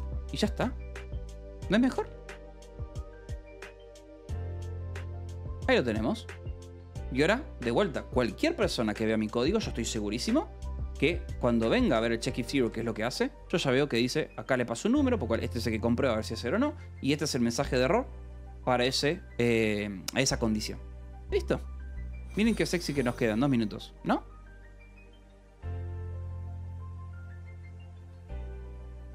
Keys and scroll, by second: 0.4 ctrl+s, 1.5-5.1 typing, 5.9 ctrl+s, 8.5 1, 8.9 j, 9.6 k, 11.2 0, 11.5 l, 13.1 shift+k, 23.5 ctrl+s.